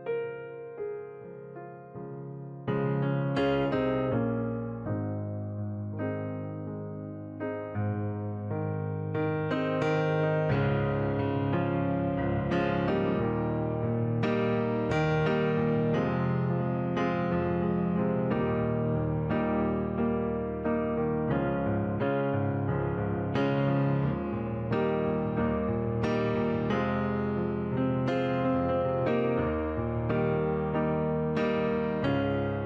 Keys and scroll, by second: 2.2 Delete.